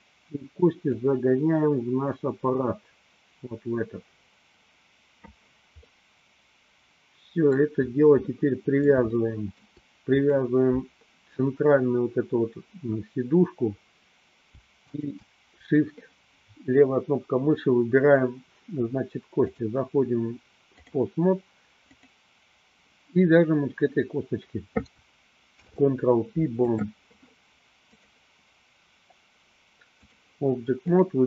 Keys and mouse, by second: 1.1-5.5 drag, 6.0-7.7 middle drag, 8.3-9.7 middle drag, 10.4 click, 14.8 shift+click, 19.5-21.1 drag, 22.1 click, 25.5 ctrl+p, 28.1-30.2 drag, 31.0 click.